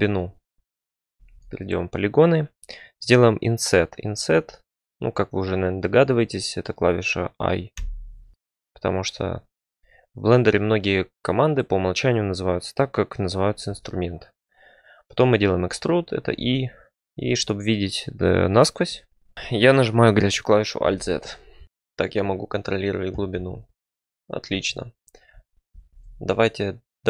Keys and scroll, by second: 1.1 3, 16.4 e, 20.9 alt+z, 23.3 g, 25.7 alt+z.